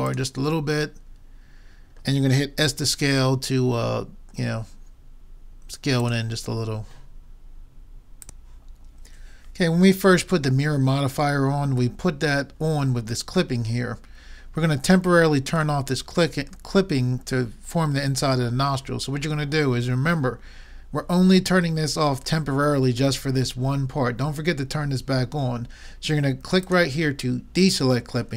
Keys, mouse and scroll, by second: 1.1 middle click, 2.7 s, 15.9 middle click, 17.2 middle click, 18.3 middle click, 19.3 middle click, 26.7-28.3 drag.